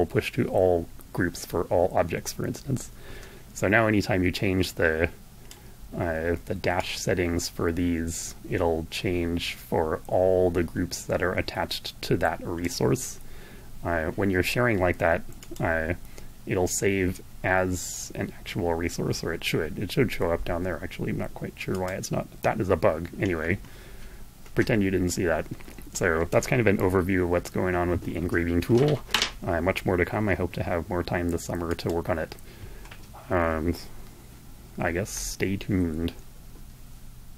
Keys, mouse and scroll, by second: 3.5-4.8 drag, 5.6-11.8 drag, 14.3 click, 20.7 click, 30.3 click.